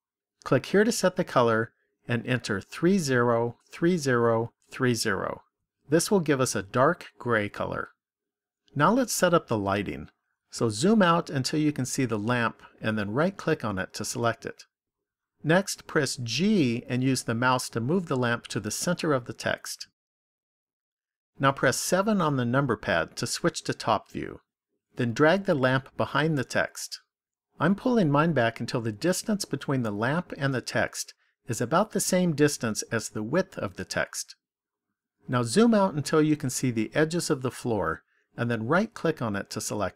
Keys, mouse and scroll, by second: 0.7 click, 10.8-12.1 scroll down 5, 12.1-14.1 scroll down 3, 14.1 right click, 16.3 g, 20.0 click, 21.9 KP_7, 26.4 click, 35.4-36.2 scroll down 3, 36.6-37.0 scroll down 2, 38.7 right click.